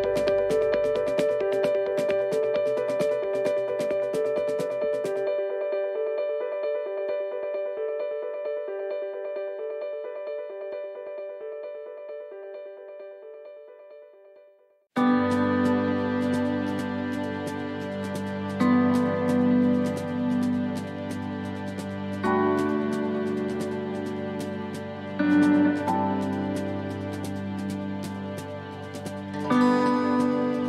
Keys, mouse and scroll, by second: 0.0 middle click, 4.6 c, 7.7 ctrl+r, 12.8 middle click, 14.7 right click, 16.0 click, 16.7 c, 26.6 middle click, 29.6 c.